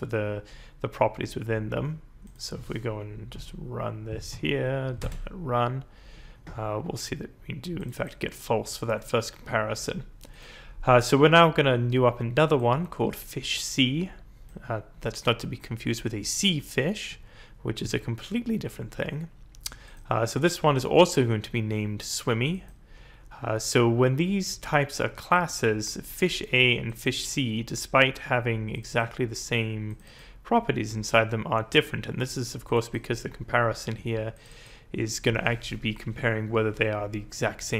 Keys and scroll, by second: 3.3 Up, 4.3 Up, 4.9 Return.